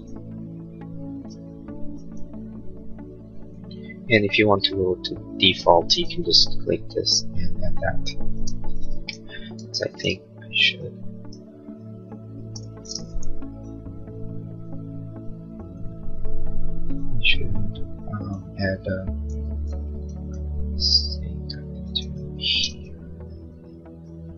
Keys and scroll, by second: 8.3 space, 9.2 ctrl+a, 10.4 b, 12.5 space, 19.3 ctrl+a, 20.0 b, 22.4 space, 22.7 Escape.